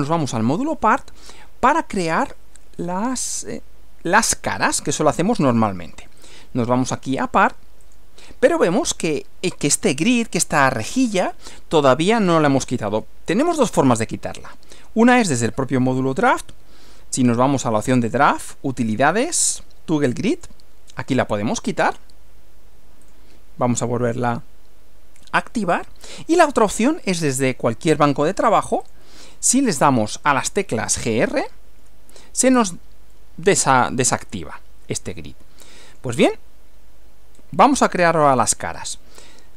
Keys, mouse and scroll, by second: 0.6 middle click, 6.2 click, 7.8 click, 8.6-8.9 scroll down 2, 12.2 scroll down 2, 12.6-13.0 scroll up 2, 14.4 click, 15.2 click, 17.3 click, 20.4 click, 23.1 click, 25.6 click, 27.2 click, 28.8 click, 31.3-32.3 typing, 33.1-36.2 middle drag, 37.3 scroll up 1.